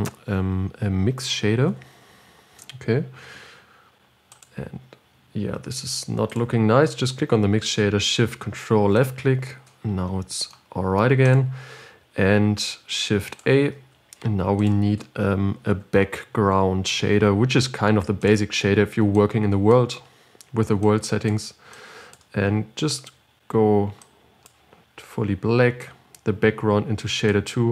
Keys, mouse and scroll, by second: 6.7 click, 9.5 ctrl+shift+click, 19.8 click, 22.1-27.7 drag.